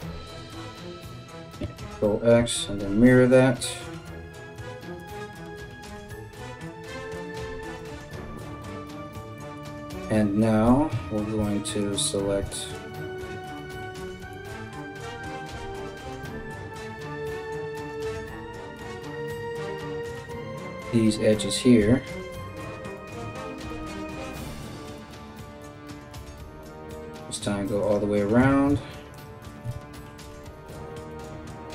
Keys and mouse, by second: 1.2 ctrl+x, 2.1 alt+x, 4.6 alt+right click, 5.5 g, 7.4 right click, 10.2 3, 11.4 alt+click, 12.3 alt+shift+click, 13.9 alt+click, 15.9 2, 17.4 right click, 19.8 alt+shift+right click, 20.2 alt+shift+right click, 20.9 alt+shift+right click, 21.7 ctrl+z, 22.1 alt+shift+right click, 22.6 right click, 23.3 right click, 24.6 alt+shift+right click, 25.2 alt+shift+right click, 25.4 alt+shift+middle click, 25.7 alt+shift+right click, 25.9 alt+middle click, 26.8 alt+shift+right click, 27.0 alt+shift+middle click, 27.4 alt+shift+right click, 27.6-28.7 alt+shift+middle drag, 28.1 ctrl+z, 28.7 alt+shift+right click, 28.9 ctrl+alt+shift+middle click, 29.7 alt+shift+right click, 29.8-31.7 alt+shift+middle drag, 30.7 alt+shift+right click, 31.3 right click.